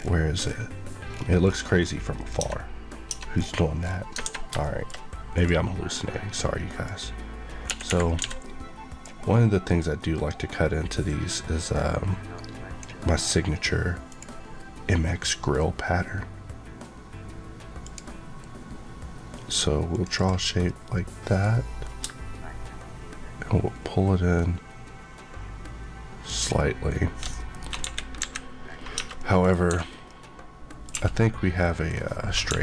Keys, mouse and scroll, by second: 1.7 scroll up 1, 2.1 click, 2.3 Tab, 3.3-4.0 scroll down 1, 8.1 d, 11.0 click, 17.7 click, 20.1 Left, 20.6 middle click, 26.2 click, 27.7 KP_3, 28.9 Tab, 29.1 middle click, 29.6 2, 29.9 scroll down 1, 30.0 middle click, 30.8 1, 31.6 middle click, 32.4 KP_1.